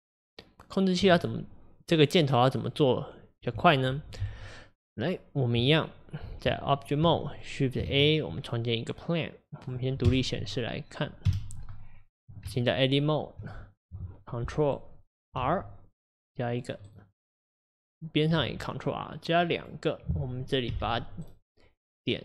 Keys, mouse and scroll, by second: 9.7 shift+a, 10.1 KP_Divide, 11.3 KP_7, 13.4 Tab, 15.4 ctrl+r, 17.8 click, 18.4 ctrl+r.